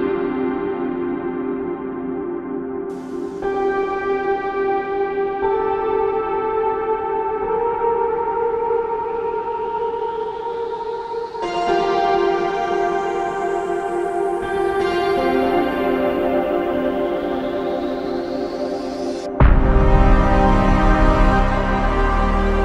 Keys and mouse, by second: 2.9 alt+click, 5.9 alt+click, 7.3 double click, 9.7 alt+click, 16.4 alt+click, 21.2 alt+click, 21.4 alt+click.